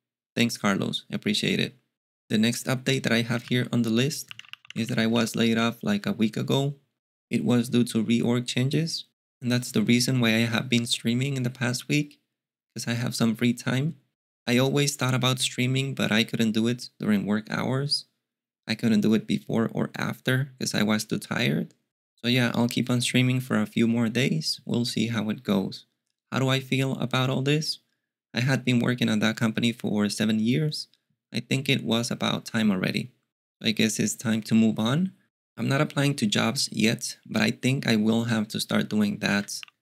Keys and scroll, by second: 3.4 alt+x, 4.0-6.5 typing, 39.0-39.8 typing.